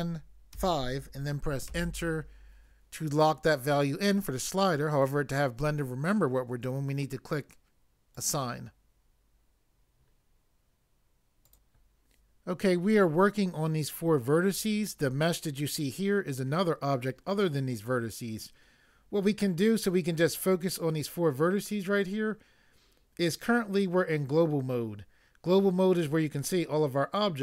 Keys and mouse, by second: 0.5 5, 1.7 Return, 8.1 click, 11.4 click.